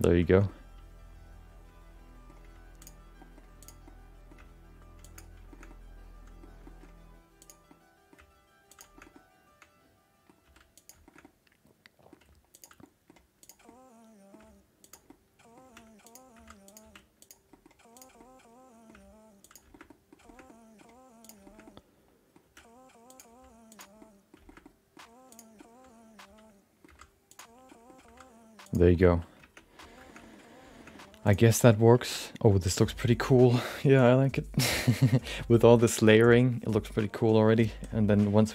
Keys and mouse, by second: 0.3 shift+middle click, 0.4-2.3 middle drag, 2.4 g, 3.2 middle click, 3.6 click, 3.8 middle click, 4.4 g, 5.5 shift+middle click, 5.7 middle click, 6.6 middle click, 7.4 click, 7.7 middle click, 8.7 g, 8.9 middle click, 9.1-10.2 middle drag, 10.4 r, 11.0 shift+middle click, 11.2 middle click, 12.2 g, 12.8 middle click, 13.4 click, 13.6 middle click, 14.8 g, 15.0 middle click, 15.6 r, 16.3 g, 16.8 r, 17.5 middle click, 17.9 click, 18.2 middle click, 18.9 g, 19.7 shift+middle click, 19.8 middle click, 20.2 shift+middle click, 20.4-23.3 typing, 20.4 middle click, 21.2 click, 21.4 shift+middle click, 21.6 middle click, 24.0 middle click, 24.4 shift+middle click, 24.6 middle click, 25.3 click, 25.6-26.8 middle drag, 27.3 g, 27.7 middle click, 28.0 g, 28.9 middle click, 29.6 Tab, 30.0 shift+middle click, 30.7 shift+middle click, 30.9 middle click, 31.2 click, 32.0 shift+middle click, 32.1 middle click.